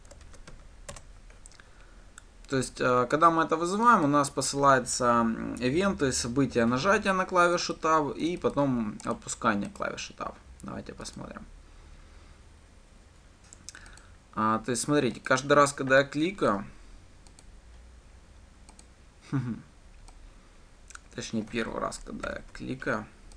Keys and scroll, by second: 1.4 Return, 11.7 ctrl+shift+F10, 22.8 ctrl+/.